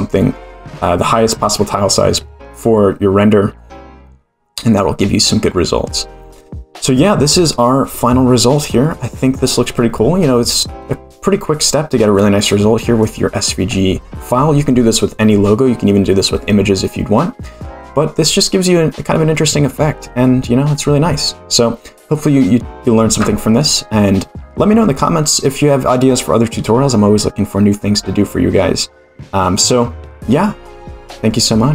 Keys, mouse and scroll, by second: 13.0 click.